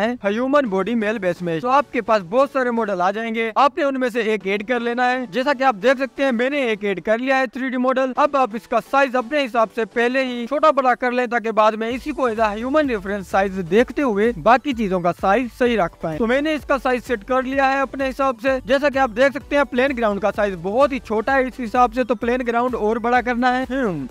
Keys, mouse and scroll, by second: 8.6 scroll up 2, 8.8-10.3 scroll down 2, 10.6-13.0 drag, 11.7-12.6 scroll up 4, 13.0-13.4 scroll up 1, 13.4-13.8 scroll down 3, 13.8-14.3 scroll up 3, 14.3-15.2 drag, 15.2-15.8 scroll down 1, 15.8 click, 16.5-17.7 drag, 16.5-17.7 scroll up 5, 18.8 click, 19.0-19.4 scroll down 1, 20.6-21.4 scroll up 5, 21.4 drag, 21.8 s, 23.0-23.3 scroll down 2, 23.5 s.